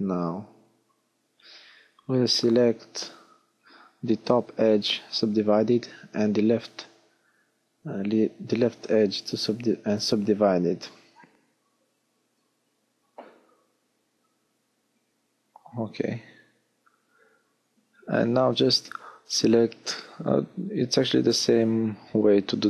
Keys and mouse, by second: 1.7 w, 4.0 w, 7.6 ctrl+z, 10.3 w, 12.2-14.4 drag, 14.4 w, 19.8 f.